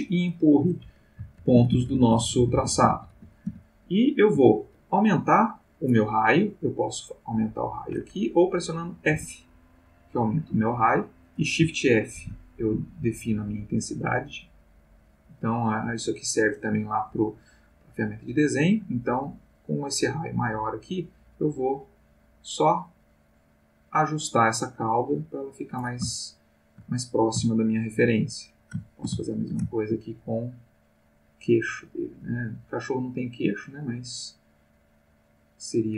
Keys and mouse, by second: 0.0 click, 1.3 ctrl+z, 7.1-8.3 drag, 9.1 f, 11.0 click, 12.2 shift+f, 16.0 click, 19.5-20.5 drag, 20.6-21.1 drag, 21.3 click, 23.5 click, 24.2-25.2 drag, 26.1 shift+middle click, 27.5 shift+middle click, 28.8-30.1 ctrl+shift+middle drag, 30.2-30.9 ctrl+shift+drag, 31.0-31.8 drag, 31.9 click, 32.8 click, 34.0-35.2 drag.